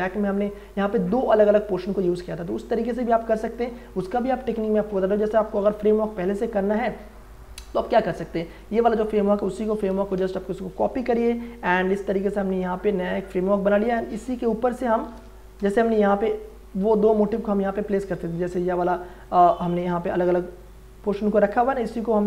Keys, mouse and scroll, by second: 2.7 click, 5.5 ctrl+j, 7.9 click, 8.5 ctrl+j, 9.6 w, 10.0 click, 11.0 ctrl+j, 11.8 ctrl+t, 12.1 right click, 13.1-15.6 drag, 14.0 ctrl+shift+j, 14.7 ctrl+shift+t, 15.6 Return, 18.2 click.